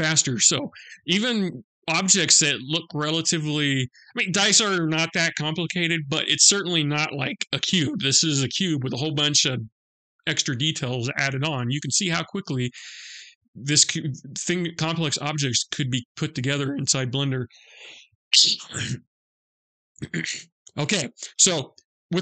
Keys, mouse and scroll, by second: 0.1 middle click, 13.0 middle click, 19.5 middle click.